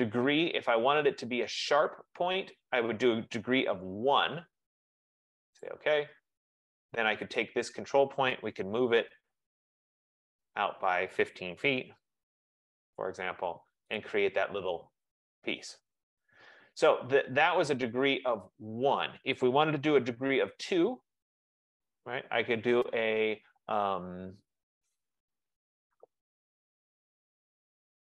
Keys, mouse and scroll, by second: 0.8-1.6 typing, 1.1-2.4 drag, 3.5 F15, 4.2 typing, 5.7 click, 7.5 click, 8.4-10.0 typing, 10.3 click, 11.6-12.8 typing, 14.1 click, 17.6 click, 19.1-24.9 drag, 20.2 ctrl+z.